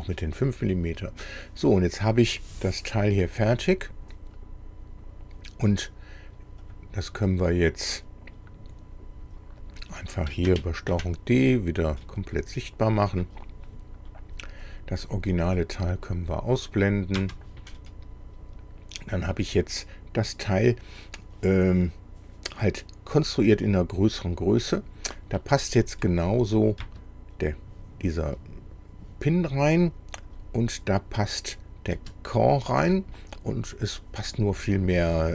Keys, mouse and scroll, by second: 1.6-2.6 middle drag, 6.7 click, 9.7 click, 10.9 ctrl+d, 11.9 click, 13.2 click, 14.7 click, 15.5-15.8 scroll up 1, 16.8 click, 17.2 space, 17.7-20.0 middle drag, 20.6 scroll down 2, 25.5 scroll up 2, 26.4 click, 26.8 space, 30.3 click, 31.5 click, 32.0 space, 32.9-34.7 drag.